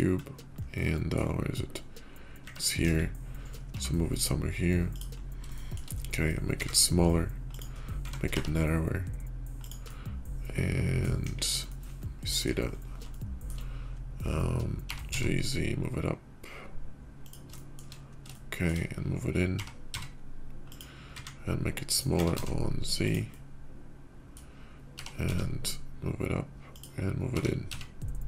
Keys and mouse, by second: 0.7 click, 0.8-1.1 middle drag, 2.5 middle drag, 2.5 `, 2.7 KP_5, 3.6 g, 5.4 shift+middle click, 5.5 shift+drag, 6.5 s, 7.9 s, 9.7 drag, 9.9 middle click, 11.1 KP_5, 11.6-12.3 drag, 12.9 shift+click, 14.6 g, 17.4 shift+middle drag, 18.2-18.6 shift+middle drag, 19.3 g, 20.9 s, 22.0 s, 23.2-24.3 drag, 24.7 g, 27.1 g.